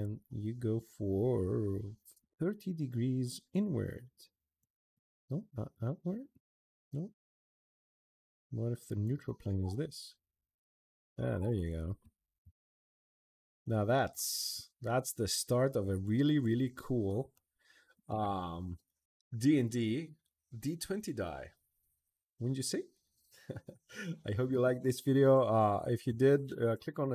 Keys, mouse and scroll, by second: 3.3 click, 4.4 click, 4.7 click, 5.5 click, 6.1 click, 8.1 click, 8.8 click, 11.4 click, 12.9 middle click, 13.8-15.3 middle drag, 15.9 right click, 16.6 middle click, 25.8 scroll down 1, 26.0 middle click, 26.3 middle click.